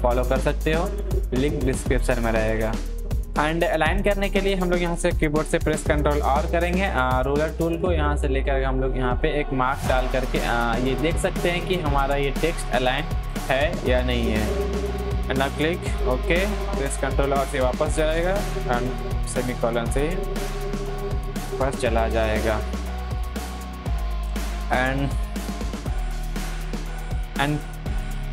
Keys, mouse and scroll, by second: 0.2 Down, 2.4 Down, 2.9 click, 5.9 ctrl+r, 7.5-13.8 drag, 13.8 Down, 15.0 click, 17.5 ctrl+r, 19.3 ctrl+;, 22.4 ctrl+;, 22.4 click, 25.9 click.